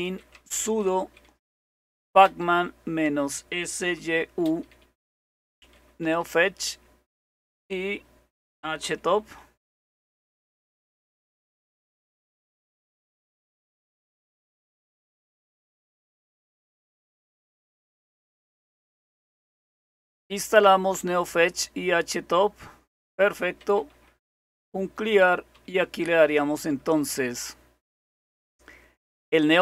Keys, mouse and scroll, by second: 0.0 typing, 1.5-6.2 typing, 8.6-10.0 typing, 12.1-12.9 typing, 14.0-15.3 typing, 19.2 Return, 23.6 c, 25.0-27.5 typing.